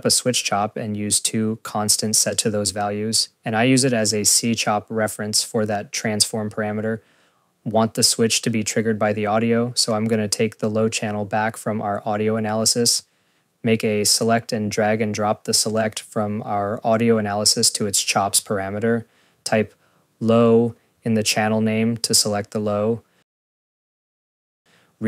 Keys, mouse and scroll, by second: 0.0-1.7 typing, 0.0 scroll, 0.6 click, 2.0 Return, 2.2 click, 2.3 ctrl+c, 2.4 ctrl+v, 2.8 click, 3.1-3.8 typing, 4.1 click, 4.2 click, 4.8 click, 4.9 click, 5.3 click, 9.0 click, 9.2 ctrl+s, 9.6 scroll, 9.9 click, 10.0 click, 11.0 scroll, 11.3 click, 11.5 click, 11.9 scroll, 12.2 Tab, 12.4-13.6 typing, 14.1 click, 14.2 click, 14.8 click, 15.0 click, 15.3 scroll, 15.7 click, 15.8 click, 16.6 click, 17.3 scroll, 18.5 click, 19.9 click, 20.8-21.9 typing, 22.3 scroll, 22.9 click, 23.0 click, 23.8 click, 24.1 scroll, 24.2 click, 24.5 click.